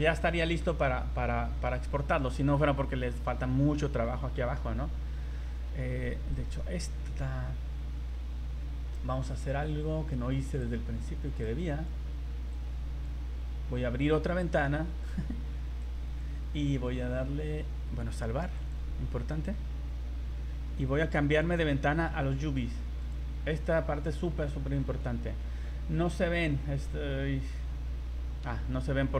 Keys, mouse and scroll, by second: 0.3 middle click, 2.0-2.3 scroll up 4, 2.9 middle click, 4.2 middle click, 4.7 scroll up 2, 5.4 Tab, 6.3 alt+right click, 6.8 scroll down 2, 8.5-8.9 scroll down 5, 8.9 middle click, 10.6 click, 11.4 click, 12.5 click, 14.0 click, 15.8 click, 18.5 click, 21.4 click, 23.4 scroll down 4, 24.0-24.4 scroll up 8, 24.8 a, 25.4-26.3 scroll down 18, 26.4-26.9 scroll up 5, 27.1-27.8 scroll down 4.